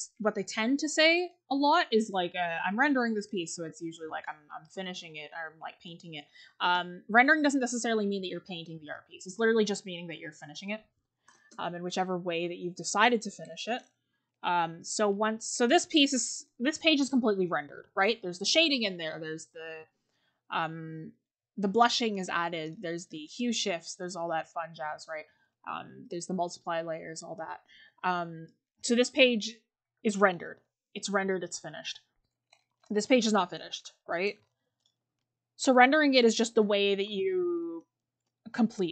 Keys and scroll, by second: 19.8 scroll up 1, 19.9-21.0 scroll down 1, 22.9 scroll, 27.8 scroll down 1, 33.4-33.7 scroll down 1, 34.1-35.1 scroll up 1, 37.0 scroll.